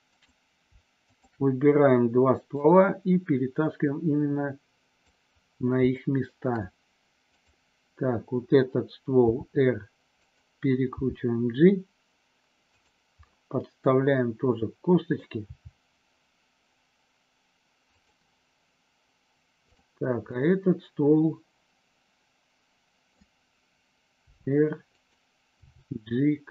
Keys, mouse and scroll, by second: 0.1 click, 1.0 shift+click, 2.6-5.0 drag, 6.0 shift+middle click, 9.1 r, 10.1 click, 10.9 g, 12.7 click, 13.2-15.2 middle drag, 15.5 g, 17.9 click, 20.2-23.2 middle drag, 24.2 r, 24.9 click, 25.6 g.